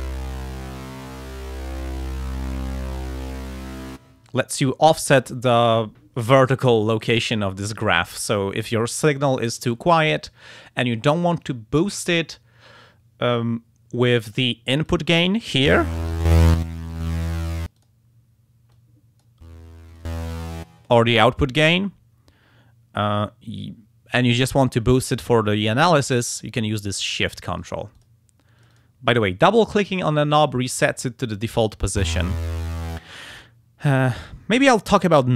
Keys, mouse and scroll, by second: 14.9-17.6 drag, 18.7 click, 19.9 click, 27.6 click, 28.0 click, 28.6 click.